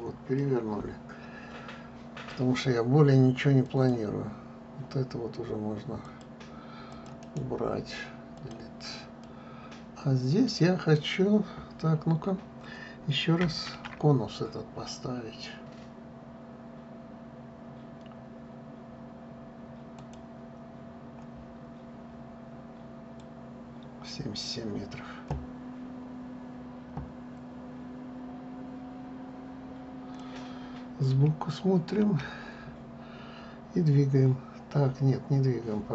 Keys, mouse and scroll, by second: 1.0-3.5 middle drag, 3.5-4.3 scroll, 4.3 click, 6.7 click, 7.6 click, 7.9-9.9 right drag, 9.9-12.9 middle drag, 14.4 shift+a, 22.2-23.9 scroll, 23.9-26.9 drag, 31.8 KP_3.